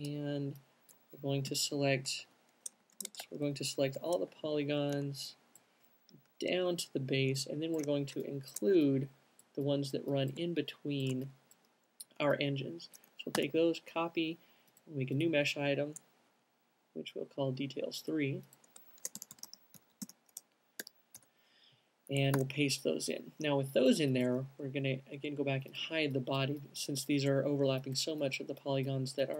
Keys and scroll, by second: 1.2 space, 1.8 |, 2.5 Right, 3.5 Left, 3.5 z, 4.1 Left, 5.5 typing, 7.7 typing, 20.6-21.3 typing, 22.7 super+v, 23.7 alt+super+v, 24.3 alt+shift+super+v.